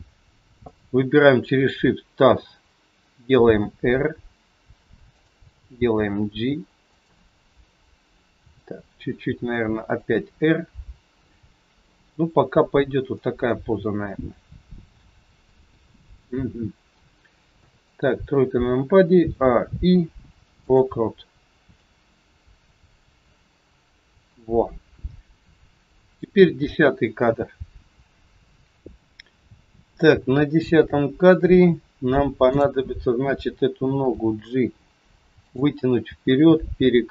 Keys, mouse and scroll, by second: 0.6 shift+click, 3.5 r, 12.6-13.1 scroll down 2, 13.1 middle click, 17.6 KP_3, 19.8 a, 19.8 i, 21.7 click, 32.4 click, 34.8 g.